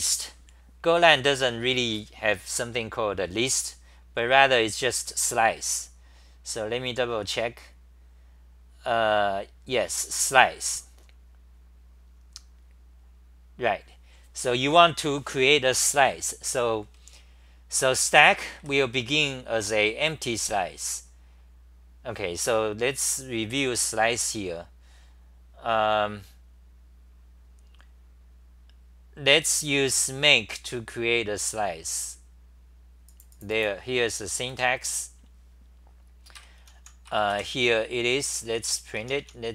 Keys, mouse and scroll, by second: 18.1 g, 18.6 1, 36.4 ctrl+g, 36.4-39.5 typing.